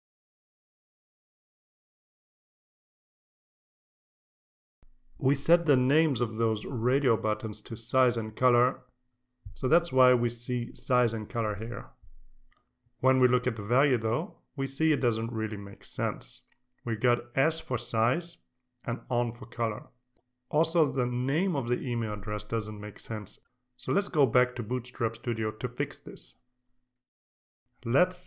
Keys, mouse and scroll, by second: 0.2 click, 0.9-3.2 drag, 3.4 click, 26.6 alt+Tab.